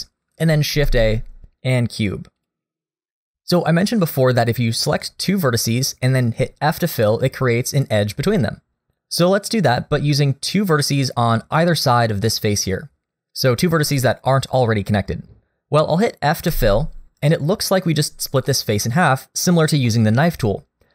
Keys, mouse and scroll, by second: 0.7 shift+a, 3.3 click, 6.7 click, 7.8 shift+click, 8.8 middle click, 16.5 f, 18.5 middle click, 19.9 middle click.